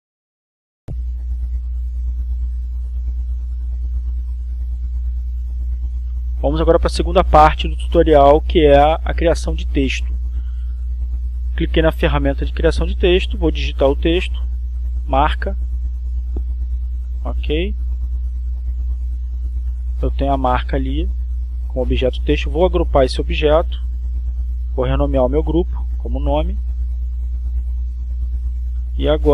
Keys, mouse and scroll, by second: 5.1 click, 10.6 click, 12.3 click, 13.3 click, 14.6-16.5 typing, 17.1-18.6 drag, 20.0 click, 22.0-23.0 drag, 23.8 click, 25.8 click, 27.2 click, 28.2-29.3 typing.